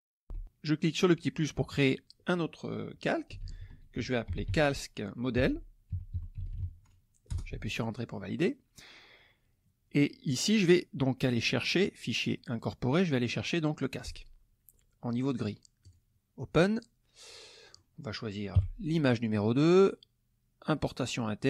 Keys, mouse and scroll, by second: 1.0 click, 3.1-7.1 typing, 7.3 Return, 11.7 click, 12.5 click, 14.0 click, 15.8 click, 17.2 click, 17.6 click, 18.5 KP_2.